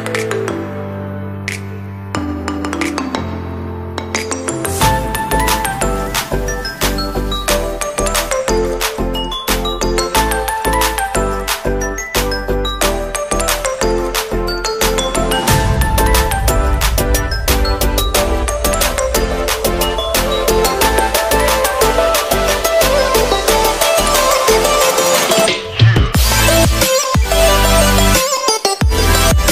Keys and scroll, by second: 1.4 ctrl+t, 11.5 alt+shift+Num_Lock.